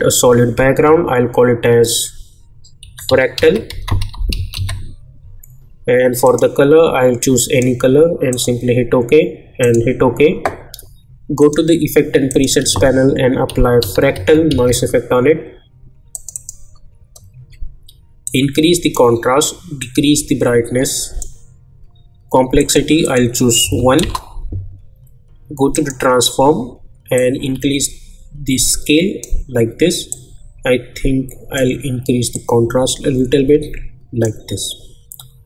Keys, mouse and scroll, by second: 2.6-5.0 typing, 6.2 click, 12.6 ctrl+a, 13.2-15.0 typing, 16.1-22.6 drag, 24.0 Return, 25.7-35.4 drag.